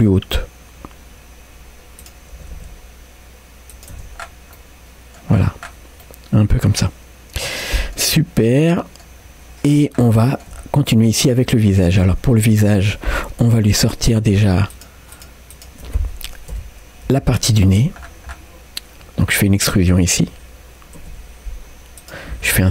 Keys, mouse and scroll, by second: 2.0 click, 2.4 g, 4.0 Tab, 4.2-4.5 scroll down 1, 4.6 middle click, 5.3-6.0 scroll down 2, 6.0-8.0 middle drag, 8.8 middle click, 9.3-9.7 scroll up 1, 9.7-10.1 scroll down 2, 10.2 shift+middle click, 10.5 shift+scroll down 1, 10.6 scroll up 2, 10.9 middle click, 11.5 shift+middle click, 12.5 Tab, 13.5 3, 14.3 click, 14.7-16.5 shift+drag, 16.5 KP_Decimal, 17.1 KP_3, 17.8-18.3 scroll down 2, 18.6 scroll down 3, 19.2-19.6 scroll up 2, 19.8 middle click, 20.3 scroll up 1, 21.2 e, 22.4 s.